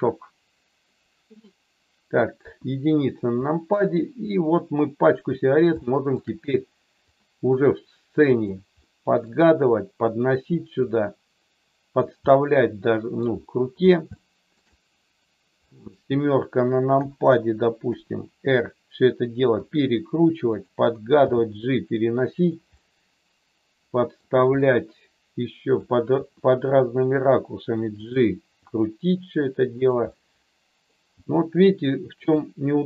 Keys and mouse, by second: 2.3 KP_1, 4.1 click, 5.9 shift+middle click, 7.1-8.3 drag, 8.8 middle click, 10.7-12.0 drag, 12.3 middle click, 14.1 shift+middle click, 15.7 middle click, 17.7 KP_7, 19.6 r, 21.1 g, 22.7-24.1 middle drag, 24.6 middle click, 25.5 middle click, 26.1 r, 28.6 g, 29.7 click, 30.0 middle click.